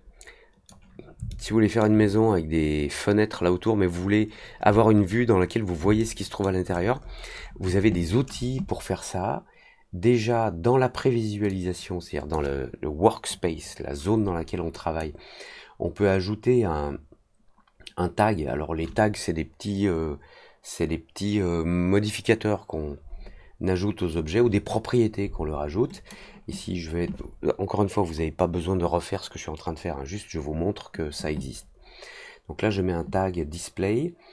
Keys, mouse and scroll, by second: 1.2-1.7 alt+middle drag, 5.9-6.4 alt+middle drag, 6.6 alt+middle click, 6.9 alt+middle click, 7.3 alt+middle click, 11.4 click, 14.9 right click, 25.9 click.